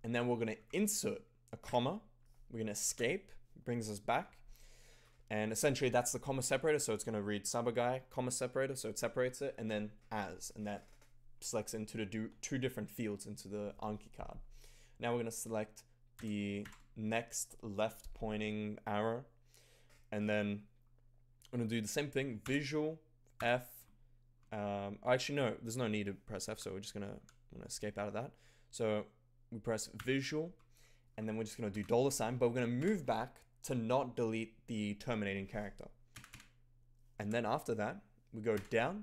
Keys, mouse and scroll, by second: 0.5 i, 1.6 ,, 2.8 Escape, 16.2 f, 16.6 shift+<, 22.5 v, 23.3 f, 26.4 Escape, 27.1 Escape, 30.0 v, 31.6 shift+$, 32.7 Left, 36.1 d, 36.2 d, 37.1 Escape, 38.5 Down.